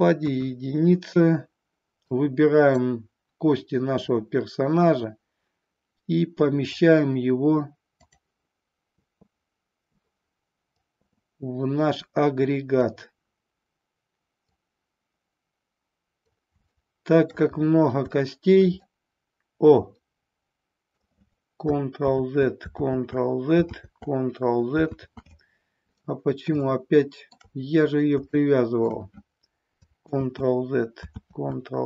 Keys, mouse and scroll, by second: 0.0 KP_1, 2.2-2.8 drag, 3.9-6.7 drag, 7.9 click, 10.8-12.9 drag, 14.4-16.3 drag, 16.7 shift+middle click, 18.1 shift+middle click, 18.8-20.9 middle drag, 20.9 scroll down 1, 22.1 ctrl+z, 22.8 ctrl+z, 23.7 ctrl+z, 24.9 ctrl+z, 26.7 middle click, 28.3-28.9 shift+middle drag, 30.1 ctrl+z, 31.2 ctrl+z.